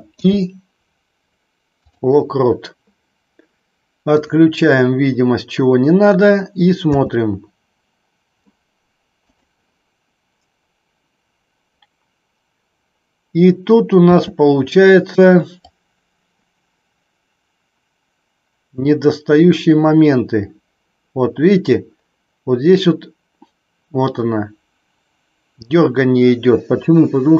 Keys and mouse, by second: 0.0 i, 4.1 click, 6.9 space, 14.0 space, 15.7-27.3 drag.